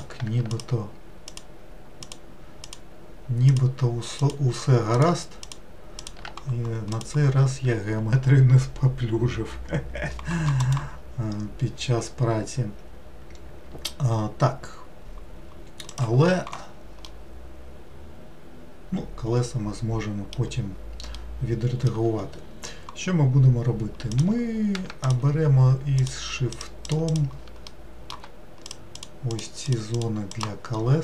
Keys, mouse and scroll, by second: 0.5 alt+click, 1.3 alt+click, 2.0 alt+click, 2.7 alt+click, 3.5 alt+click, 4.2 alt+click, 4.9 alt+click, 5.5 alt+click, 6.0 alt+click, 6.9 click, 17.1-20.1 middle drag, 21.2-24.1 middle drag, 24.1 click, 25.1 shift+click, 26.0 shift+click, 26.6 shift+click, 26.9 shift+click, 27.1 shift+click, 27.7 middle click, 28.7 shift+click, 29.0 shift+click, 29.3 shift+click, 29.7 shift+click, 30.0 shift+click, 30.3 shift+click.